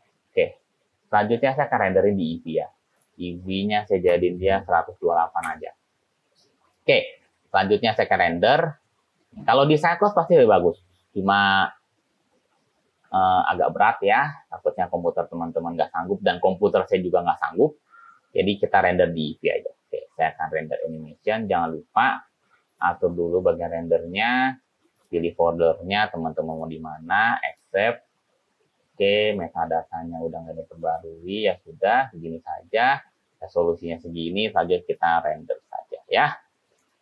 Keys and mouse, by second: 3.2-6.7 drag, 22.9 click, 31.1 click, 35.1-37.0 drag.